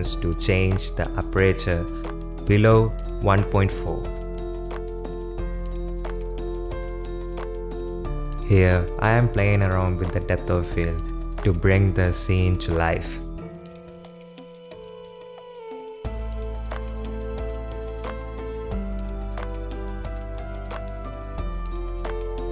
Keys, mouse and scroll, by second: 0.4 click, 0.7 space, 5.3 space, 5.6 space, 6.0 space, 7.3-10.1 drag, 10.1 right click, 12.1 click, 12.5 ctrl+space, 13.0 shift+click, 14.4 space.